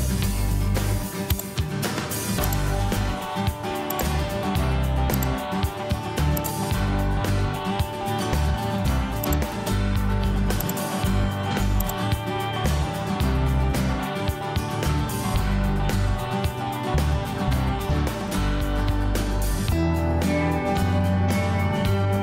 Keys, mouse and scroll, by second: 0.0 Delete, 9.8 Escape, 10.6 Escape.